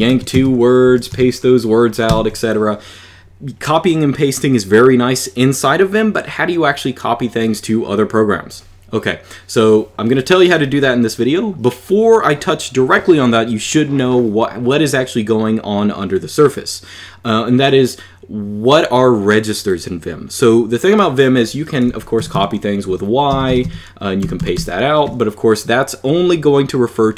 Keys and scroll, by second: 0.0-2.0 typing, 21.4-24.3 typing.